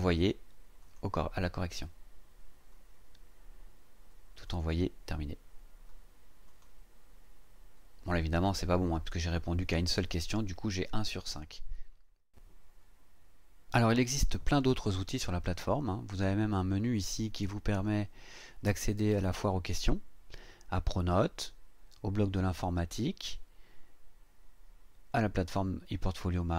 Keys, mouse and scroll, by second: 0.8 click, 4.4 click, 6.5 click, 16.9 click.